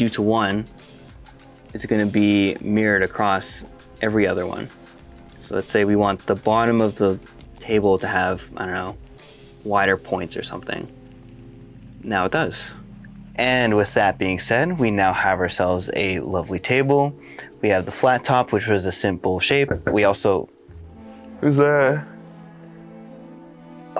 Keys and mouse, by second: 0.5 ctrl+r, 2.4 click, 3.1 middle click, 3.5 click, 5.0 middle click, 5.1 shift+middle click, 5.6 alt+z, 6.1 middle click, 6.6 shift+middle click, 7.0 middle click, 7.4 shift+click, 8.7 s, 9.9 click, 10.4 Tab, 11.4 alt+z, 11.6 middle click, 11.9 shift+middle click, 12.6 right click, 13.2 middle click.